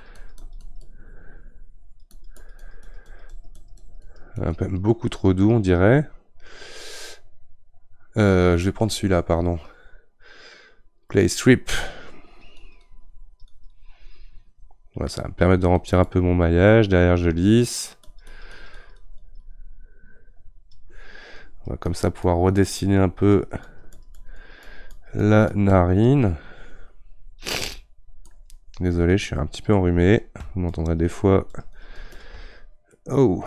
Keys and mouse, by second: 5.0-9.0 right drag, 9.0-33.0 drag, 33.0-33.4 middle drag.